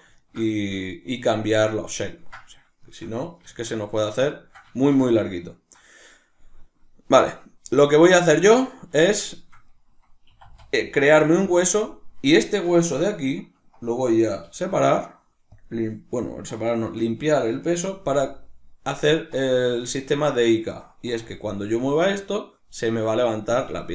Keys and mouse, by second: 3.4 alt+q, 10.3 e, 11.6 click, 11.9 right click, 12.5-16.6 shift+middle drag, 14.5 alt+p, 16.6 right click, 18.0 g, 19.0 right click, 19.9-22.5 shift+middle drag, 21.2 g, 22.5 right click, 23.2 right click.